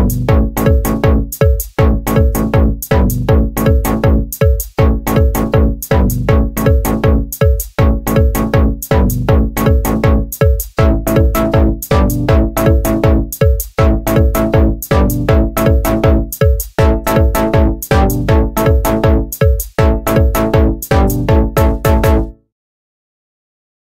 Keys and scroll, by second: 0.0-1.8 typing, 3.0-4.3 typing, 6.8-9.1 typing, 10.2-14.1 typing.